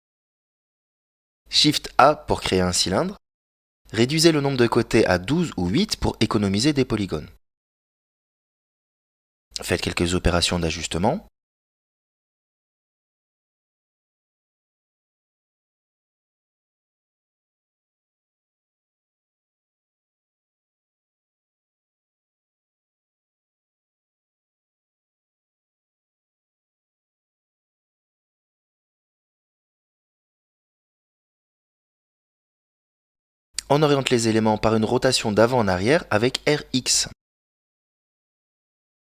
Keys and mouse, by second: 1.4 shift+a, 4.1 click, 5.7-7.3 drag, 8.8 click, 9.7 s, 12.7 s, 15.7 s, 17.3 g, 19.9 KP_Decimal, 22.0 s, 25.7 right click, 26.9 s, 30.1 g, 32.3 middle click, 33.0 r, 36.7 middle click.